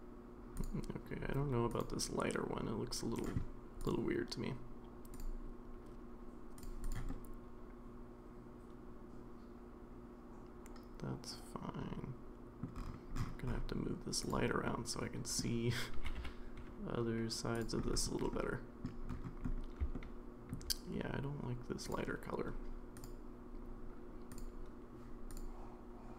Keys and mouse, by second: 1.7 click, 5.2-6.6 drag, 6.8 click, 7.1-12.6 middle drag, 14.7-15.4 middle drag, 15.9 g, 18.3-18.9 middle drag, 19.9-20.5 shift+middle drag, 23.0-24.4 drag.